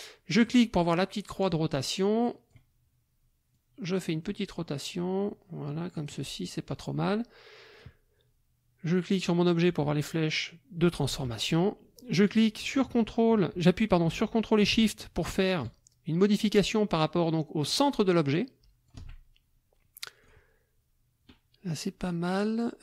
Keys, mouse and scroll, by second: 0.4 click, 1.5-2.7 drag, 3.5-6.2 drag, 7.7 click, 11.0-19.1 ctrl+drag, 20.2 click.